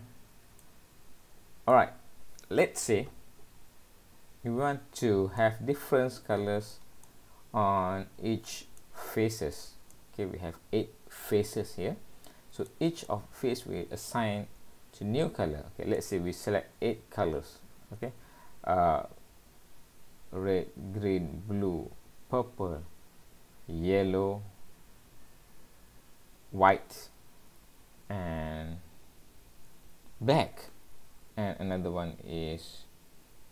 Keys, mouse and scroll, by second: 0.0-0.3 scroll down 1, 0.6 shift+middle click, 5.4 middle click, 7.1 middle click, 8.8 middle click, 9.9 middle click, 13.1 middle click.